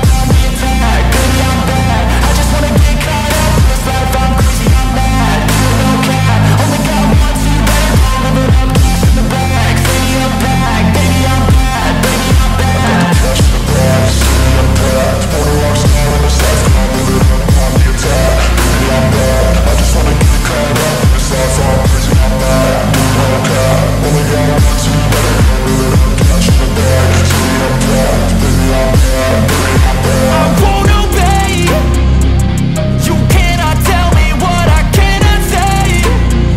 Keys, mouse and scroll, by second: 7.4-7.8 scroll down 1, 9.4 shift+click, 9.6 scroll down 1, 9.9 alt+click, 10.3 alt+middle click, 13.2 alt+click, 15.1 alt+middle click, 16.5 alt+middle click, 16.9-17.3 scroll up 1, 26.0 double click, 26.6 typing, 27.6-28.4 scroll up 1, 28.4 alt+middle click, 30.3 c.